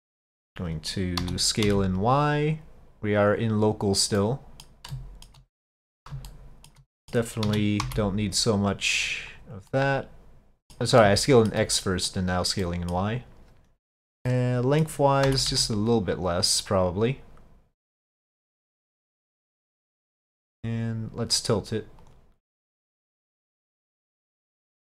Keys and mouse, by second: 0.5 middle click, 1.2 s, 4.2-4.7 middle drag, 5.0-5.3 shift+middle drag, 5.7-6.1 middle drag, 6.4-6.8 shift+middle drag, 7.0 middle click, 7.5 s, 9.7-10.8 middle drag, 11.2-11.6 shift+middle drag, 11.8-12.1 middle drag, 12.7 middle click, 14.4 middle click, 15.3 s, 19.1 click, 20.6 click, 22.1 click, 23.1 click, 24.7 click.